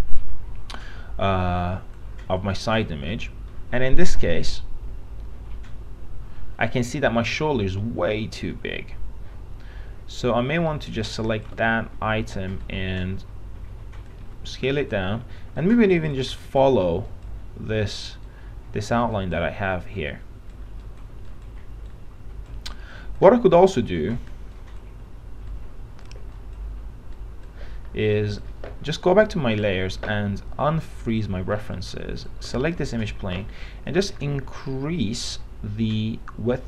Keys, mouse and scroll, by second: 2.7 middle click, 3.3 middle click, 11.1 click, 12.2 r, 14.5 1, 14.9 click, 15.3 w, 31.7 middle click, 31.9-32.4 scroll down 1, 32.4 click, 32.7 middle click, 33.1-33.8 scroll down 1, 33.8 middle click, 35.5-36.6 drag.